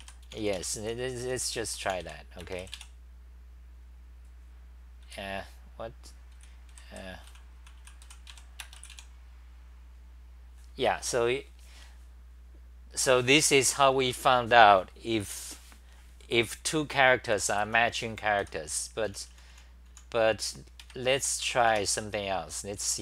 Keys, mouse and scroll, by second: 0.0-2.5 typing, 0.6 Home, 6.4 w, 6.7 d, 7.8-8.8 typing, 17.3-21.2 typing.